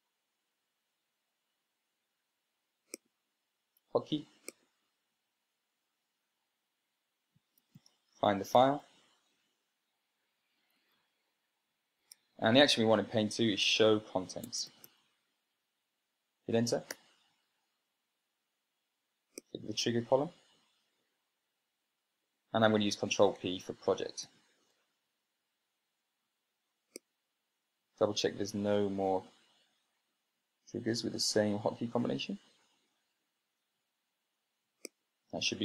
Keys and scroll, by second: 8.1-9.2 typing, 9.5 Right, 11.3 Down, 11.5 Down, 11.7 Down, 13.0 Tab, 15.4-16.2 typing, 17.9 Return, 25.2 ctrl+p.